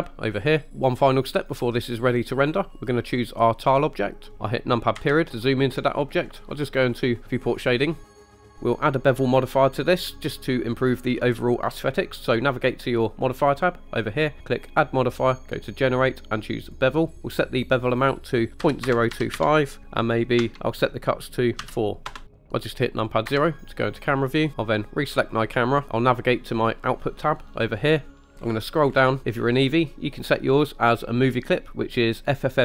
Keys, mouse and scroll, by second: 0.0 drag, 3.7 click, 5.0 KP_Decimal, 5.5-6.0 middle drag, 7.4 click, 8.0 middle drag, 8.3 scroll up 2, 8.3 middle drag, 8.5 click, 13.6 click, 14.6-16.8 drag, 18.0-22.2 drag, 23.4 KP_0, 25.4 click, 27.7 click, 28.5-29.2 scroll down 5, 31.3-32.4 drag.